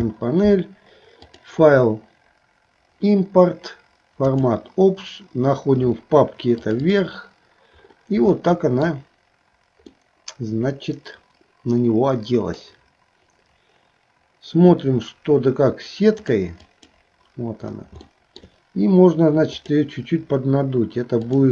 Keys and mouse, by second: 1.4-4.7 drag, 8.3 shift+middle click, 9.9-12.6 middle drag, 16.3 click, 18.1 shift+middle click, 19.6 click, 21.2-21.5 drag.